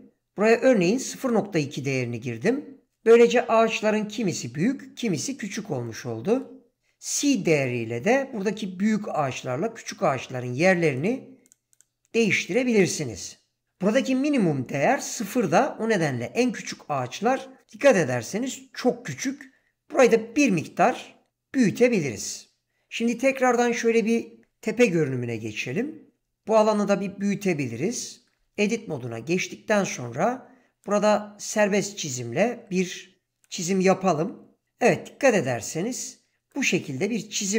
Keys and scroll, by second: 25.0 7, 26.5 ctrl+space, 28.5 Tab.